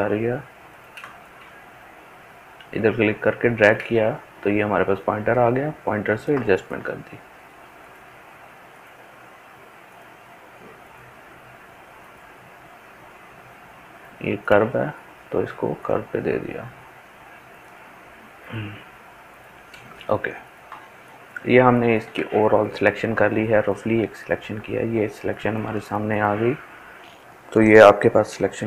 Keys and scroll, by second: 27.0 ctrl+space.